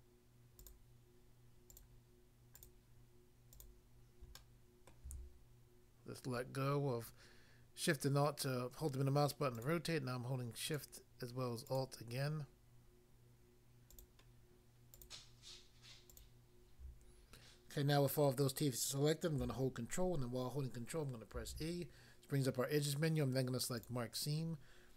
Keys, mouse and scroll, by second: 2.5 alt+click, 3.5 alt+click, 4.4 middle click, 4.9 middle click, 9.6 alt+click, 9.7 alt+click, 10.7 alt+click, 10.8 alt+click, 11.7 alt+click, 11.8 alt+click, 13.9 alt+click, 14.9 alt+click, 16.1 alt+click, 21.4 ctrl+e, 23.8 click.